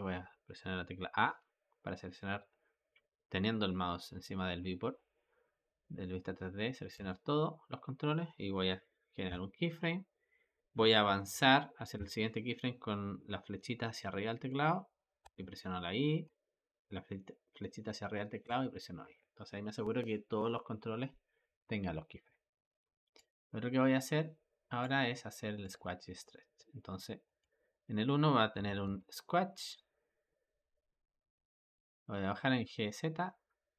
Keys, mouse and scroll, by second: 1.2 a, 6.8 a, 9.1 i, 11.8 Up, 15.1 i, 16.1 Up, 18.3 i, 23.0-25.6 drag, 27.1-28.6 drag, 28.6 g.